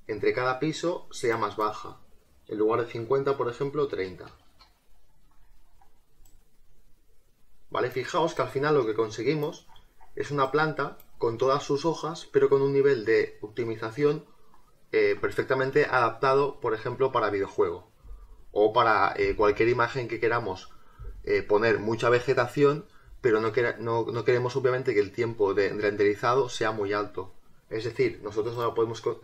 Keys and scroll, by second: 3.8 3, 4.5 Return.